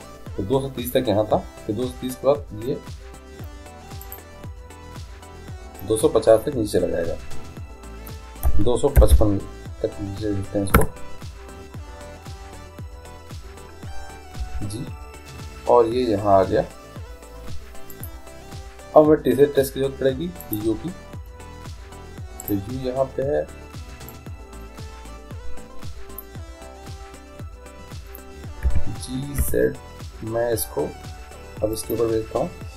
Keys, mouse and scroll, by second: 4.1-5.9 drag, 9.2 5, 14.5 g, 20.5-22.3 drag, 22.5-24.4 right drag, 24.2-26.0 drag, 28.7 g.